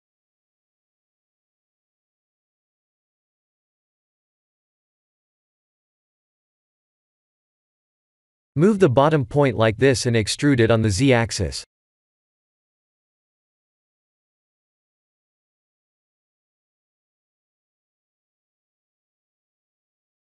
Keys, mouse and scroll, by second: 0.5 KP_1, 0.8 KP_7, 1.6-3.5 scroll up 2, 3.9 g, 4.8 ctrl+z, 5.6 o, 6.2 o, 7.8 g, 19.8 middle click.